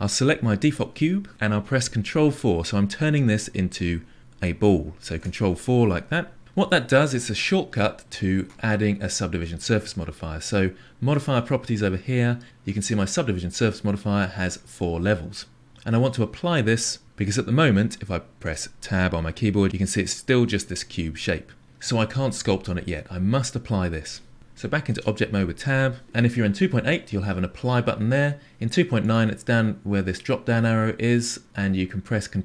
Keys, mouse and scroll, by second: 5.1 ctrl+4, 11.1 click, 18.6 Tab, 24.3 Tab, 24.9 Tab, 29.0-32.2 drag.